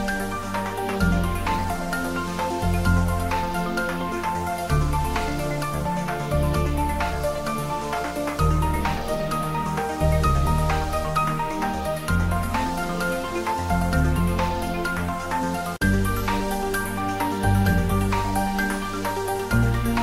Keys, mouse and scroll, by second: 0.0-0.5 typing, 0.9 click, 2.0 shift+click, 2.8-7.1 typing, 4.4 click, 4.5 ctrl+z, 6.0 click, 7.5 click, 7.8 shift+middle click, 8.3 ctrl+middle click, 8.6 shift+middle click, 9.0 ctrl+middle click, 9.5 r, 10.3 click, 10.5-12.5 ctrl+middle drag, 12.5 r, 13.0 click, 13.3 g, 14.2 click, 14.8 r, 15.4 click, 15.7 g, 17.4 click, 18.2 ctrl+middle click, 19.2 ctrl+s.